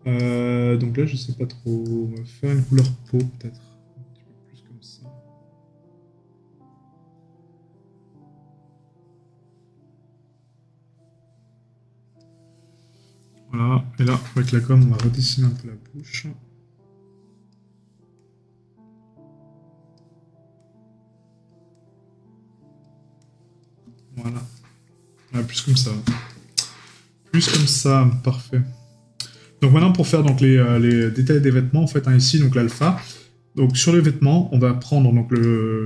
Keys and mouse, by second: 15.1 right click, 24.0 right click, 30.0 right click.